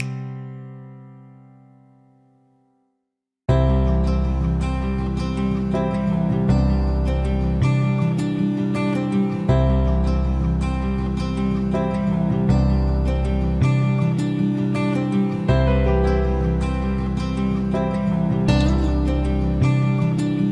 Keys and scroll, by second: 13.3 Delete.